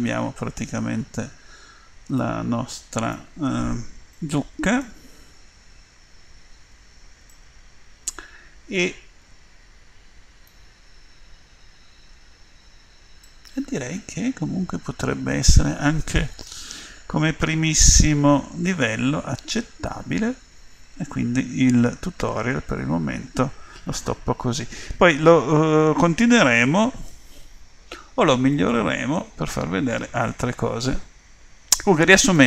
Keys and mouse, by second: 3.6-6.5 middle drag, 6.7 Tab, 9.2 middle click, 9.9 middle click, 10.4 middle click, 12.7-14.9 middle drag, 15.3 middle click, 16.0 middle click, 16.7 middle click, 17.0 middle click, 23.1 middle click, 25.7 middle click, 27.8-28.8 middle drag, 29.1 middle click, 29.9-31.7 middle drag, 32.0 middle click.